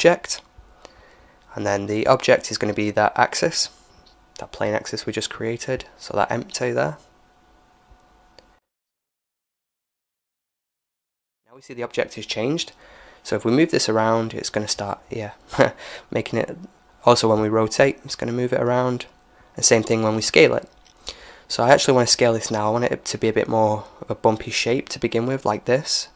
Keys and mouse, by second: 9.4-11.3 middle drag, 11.3-13.3 right drag, 12.4 g, 15.7 r, 19.2-21.4 middle drag, 21.5 s.